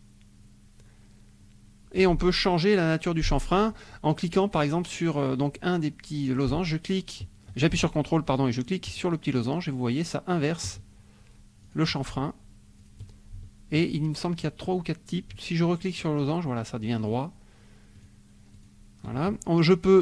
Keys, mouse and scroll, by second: 8.9 ctrl+click, 10.4 ctrl+click, 11.6 ctrl+click, 12.7 ctrl+click, 15.9 ctrl+click, 17.1 ctrl+click, 18.0 ctrl+click.